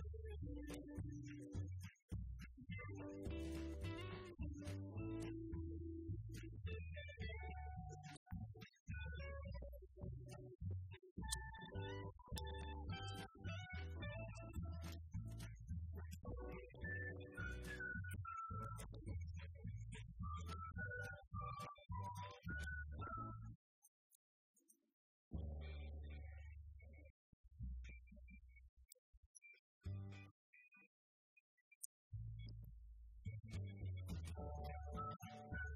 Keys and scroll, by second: 0.5 Left, 9.5 Delete, 10.1 Right, 11.1 =, 11.5 Left, 12.5 Right, 12.9 Left, 14.1 -, 16.3 BackSpace, 16.7 *, 17.2 Left, 18.6 Return, 19.9 Up, 20.6 Left, 21.2 Right, 21.9 =, 22.2 Right, 23.3 Right, 24.3 Return, 25.4 Escape, 25.7 Right, 25.9 Left, 26.3 Up, 27.2 Right, 29.1 Delete, 29.4 Right, 29.8 Left, 31.4 Left, 32.2 Right, 32.3 Left, 32.8 Right, 33.8 =, 34.1 Right, 34.9 *, 35.3 5.